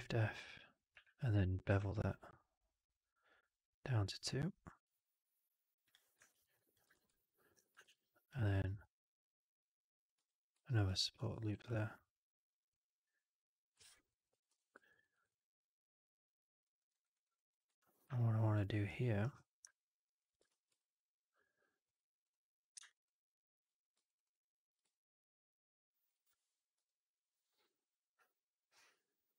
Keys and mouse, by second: 0.4 click, 0.8 w, 1.7 alt+b, 6.2 alt+right click, 6.4 alt+click, 7.0 shift+x, 7.0 alt+click, 7.7 shift+f, 8.5-9.9 drag, 10.0 w, 10.5 alt+click, 10.7 alt+click, 11.4 r, 13.0 middle click, 13.7 alt+click, 14.0 alt+click, 14.7 4, 14.8 right drag, 15.0 right drag, 15.2-16.5 drag, 16.7 middle click, 16.8 right drag, 17.0 right drag, 17.2 alt+click, 17.9 3, 18.0 click, 18.7 right click, 20.4 shift+x, 20.6-21.7 drag, 22.1 click, 23.9 shift+click, 24.8-25.9 alt+drag, 26.6 Up.